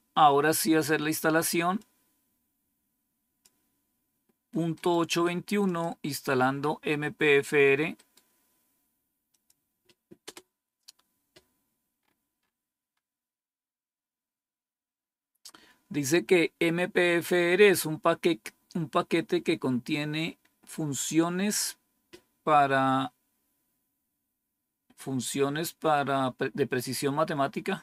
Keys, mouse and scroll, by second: 1.7-3.4 drag, 4.7 right click, 5.6 click, 7.9 right click, 9.2 click, 10.2 Return, 11.9-12.4 scroll up 2, 12.9 scroll up 1.